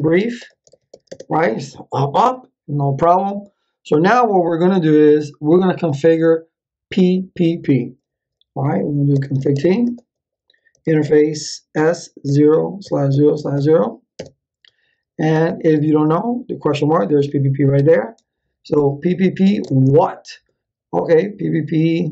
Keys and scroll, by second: 0.0-1.4 typing, 8.8-14.0 typing, 14.1 Return, 15.3 shift+/, 17.7 ctrl+c, 19.4 space, 19.6 shift+/.